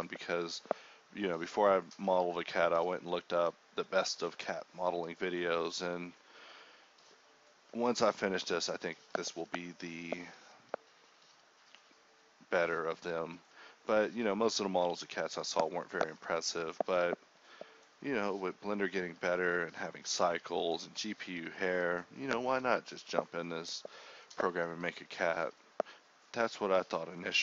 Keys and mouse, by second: 0.9 f, 1.4 f, 1.9 g, 2.4 ctrl+r, 3.6 click, 3.9 f, 4.1 f, 4.3 Tab, 5.2-8.8 typing, 5.4 Tab, 8.9 Tab, 9.9 Tab, 10.4 ctrl+r, 11.1 ctrl+z, 11.6 k, 13.2 g, 13.9 g, 14.6 alt+s, 15.6 g, 16.0 alt+s, 16.4 g, 17.7 alt+s, 18.3-20.9 typing, 19.6 middle click, 21.4 middle click, 21.9 a, 22.4 k, 23.8 a, 24.1 k, 25.6 middle click, 25.6 a, 26.2 ctrl+r.